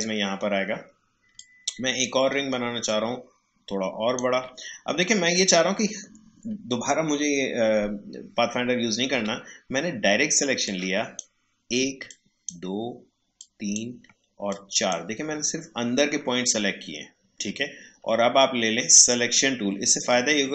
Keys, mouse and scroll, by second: 1.3-2.8 alt+drag, 9.1 a, 10.6-12.0 drag, 12.0-18.9 shift+drag.